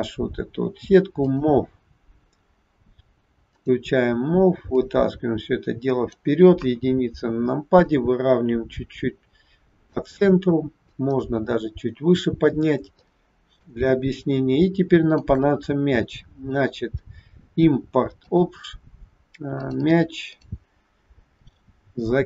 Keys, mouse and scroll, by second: 1.1 click, 3.6 click, 4.7 click, 6.7 KP_1, 7.7 click, 10.8 click, 13.1 shift+middle click, 15.1 click.